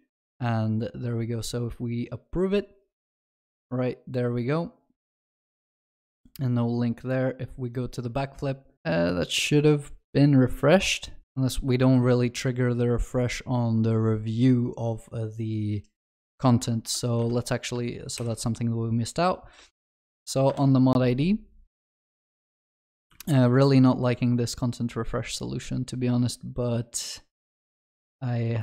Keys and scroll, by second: 18.3 ctrl+shift+n, 23.2 ctrl+d.